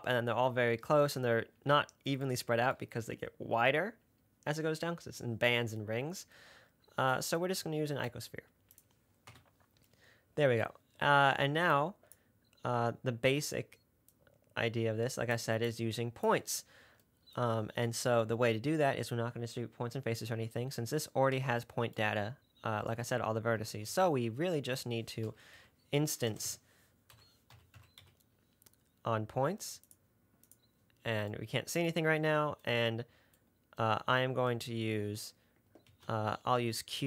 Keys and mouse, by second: 7.5-9.2 drag, 9.6 Delete, 24.1 shift+a, 26.7 BackSpace, 36.1 shift+a.